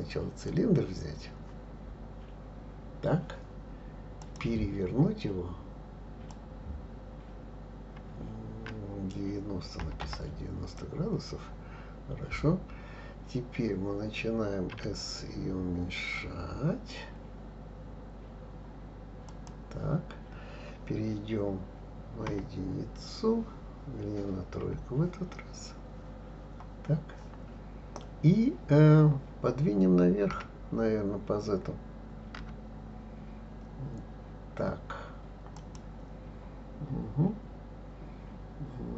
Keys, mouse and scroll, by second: 1.7 scroll down 1, 4.2-9.3 drag, 11.8-12.3 scroll up 2, 12.8-14.7 scroll down 1, 14.7 s, 22.3 KP_1, 24.6 KP_3, 25.6-26.2 scroll up 1, 26.2-27.0 scroll up 2, 27.0 scroll up 1, 30.3 g.